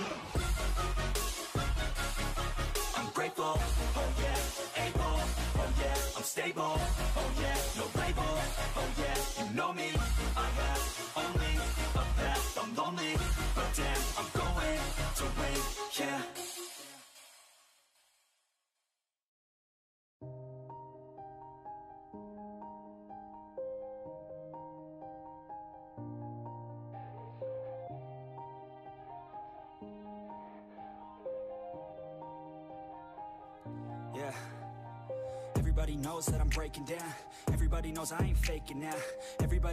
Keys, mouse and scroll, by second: 0.8 ctrl+r, 1.9 ctrl+x, 2.3 ctrl+r, 3.0-3.5 scroll up 1, 3.5 ctrl+r, 5.0 ctrl+r, 5.8 scroll down 1, 6.0 middle click, 6.2 scroll up 2, 6.3 scroll down 1, 6.5 middle drag, 6.7 click, 6.9 Tab, 7.0 drag, 7.2-9.2 middle drag, 9.3 scroll down 2, 9.4-10.5 middle drag, 11.0 shift+middle drag, 11.2 scroll up 2, 11.4 click, 11.9 Tab, 12.4 l, 12.7 h, 13.1 ctrl+z, 13.3 g, 17.3-18.5 middle drag, 18.5 g, 19.7-20.0 middle drag, 20.0 Tab, 20.3-21.1 middle drag, 21.1 click, 21.2-22.5 middle drag, 22.5 click, 23.3 Tab, 23.4 scroll down 1, 23.6-24.5 shift+middle drag, 24.5 2, 24.7 alt+click, 25.0-25.3 scroll up 1, 25.3 s, 27.4 click, 27.7 Tab, 27.8 drag, 27.9-28.4 middle drag, 28.4 scroll down 3, 28.5-29.1 middle drag, 29.1 KP_3, 29.5 click, 29.6 Tab, 30.0 shift+middle click, 30.2 scroll up 1, 30.4 shift+a, 31.2 s, 32.3 scroll up 3, 32.5 shift+middle click, 33.4 r, 34.3 s, 35.9-36.3 scroll up 2, 36.3 drag, 36.4 click, 36.8 1, 37.2 shift+drag, 38.3-38.7 drag, 39.4 e.